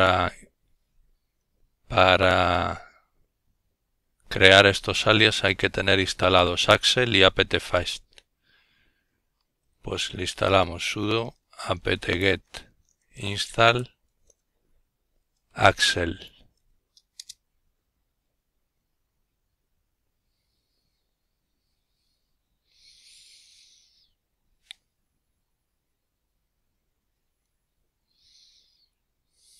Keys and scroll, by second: 6.6-14.3 typing, 14.4 Return.